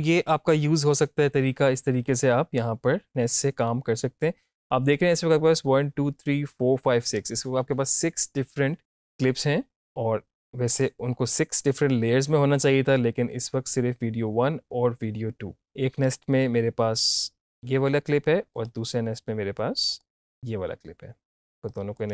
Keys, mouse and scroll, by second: 4.9 click, 10.7 click, 15.6 click, 16.0 right click, 17.3 click, 18.5 right click, 19.9 click.